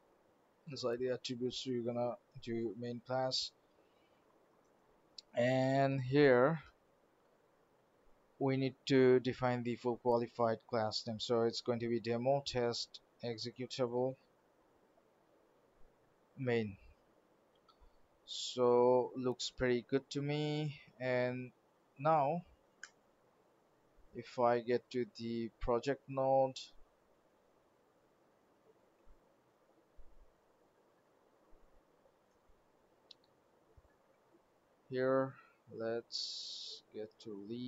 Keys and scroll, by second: 17.4 ctrl+s, 22.8 alt+Return, 28.8 alt+Tab.